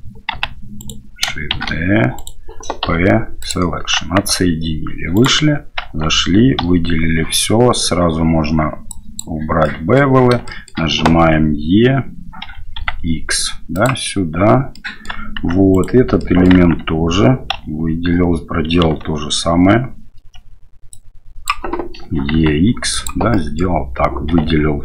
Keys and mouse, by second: 0.4 g, 1.6 shift+d, 2.8 p, 4.3 Tab, 5.1 right click, 5.8 Tab, 6.6 a, 8.9 click, 9.6 middle click, 10.4 shift+middle click, 12.4 e, 14.8 middle click, 15.3 Tab, 15.7 right click, 16.2 middle click, 16.5 Tab, 17.5 a, 21.0 click, 22.0 e, 23.3 click, 24.3 a.